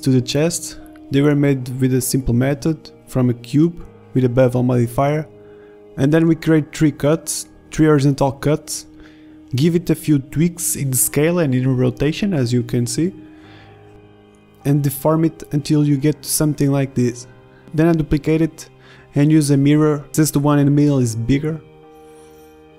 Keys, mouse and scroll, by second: 0.4 s, 1.4 ctrl+Tab, 2.2 ctrl+z, 2.4 ctrl+r, 3.1 ctrl+Tab, 4.7 Tab, 5.5 Tab, 5.7 s, 6.4 Tab, 6.5 s, 7.5 s, 8.4 s, 10.3-10.8 middle drag, 11.1 Tab, 12.3 middle click, 13.3 ctrl+z, 13.4-16.7 typing, 14.2 Tab, 14.3 Tab, 14.6 ctrl+z, 15.4 Tab, 15.5 Tab, 16.4 Tab, 17.6 Tab, 18.6 KP_Enter, 18.7 KP_Decimal, 19.7 s, 21.6 s, 21.8 s, 22.4 s.